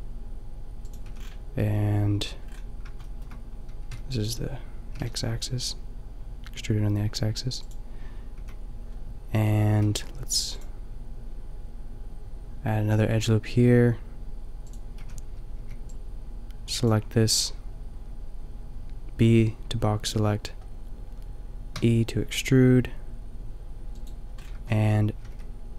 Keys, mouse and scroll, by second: 1.1 a, 2.4 middle click, 3.8 b, 4.9 g, 8.4 a, 9.8 ctrl+r, 15.0 a, 15.6 b, 21.8 e, 24.7 click, 25.2 g.